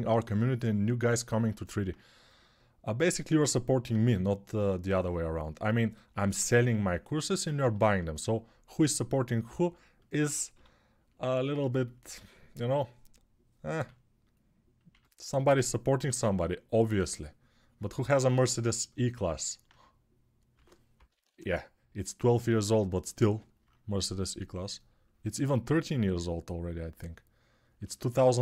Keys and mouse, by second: 6.0 1, 10.3 g, 13.5 q, 14.7 1, 20.3 2, 20.7 [, 20.9 [, 21.0 [.